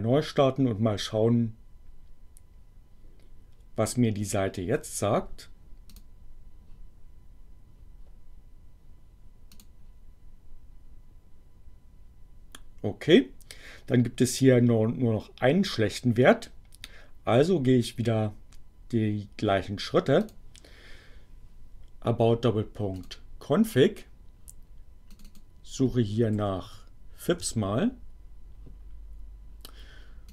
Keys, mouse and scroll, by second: 5.9 click, 9.5 click, 20.2 click, 22.9 click, 25.0 click, 26.1-27.9 typing, 30.2 click.